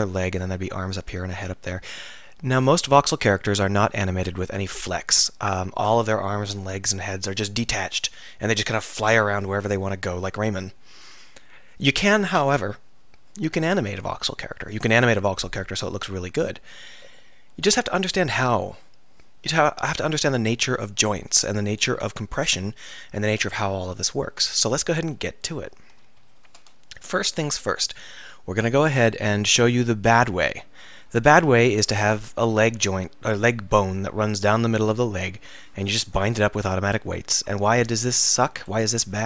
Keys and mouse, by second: 0.7-2.1 middle drag, 7.3-26.3 middle drag, 26.3 KP_3, 26.5 Tab, 30.2-33.1 drag, 36.0 ctrl+p.